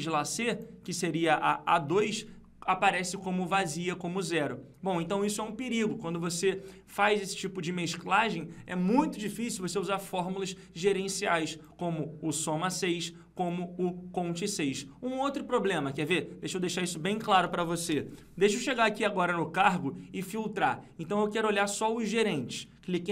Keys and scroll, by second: 18.1 ctrl+-.